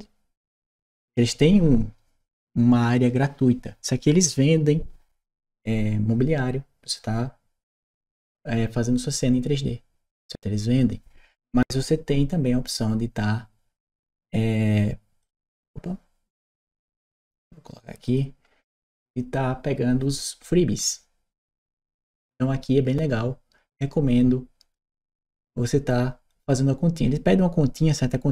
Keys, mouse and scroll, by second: 0.6 click, 17.8 click.